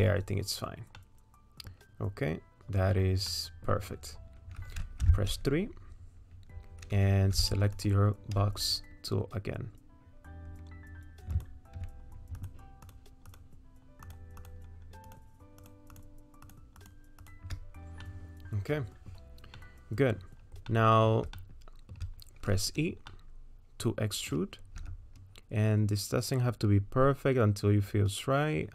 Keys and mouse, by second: 1.1 middle click, 2.6 middle click, 3.3 middle click, 5.1 3, 7.4 w, 11.4 click, 12.9 shift+click, 13.3 shift+click, 14.1 shift+click, 15.9 shift+click, 16.5 shift+click, 18.1-19.1 middle drag, 19.6 middle click, 20.7 middle click, 21.4 shift+click, 23.1-24.3 middle drag, 25.2 e.